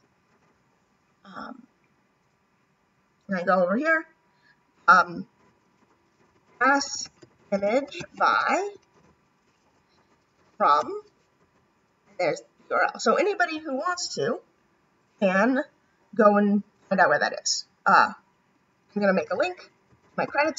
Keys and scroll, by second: 19.3 [.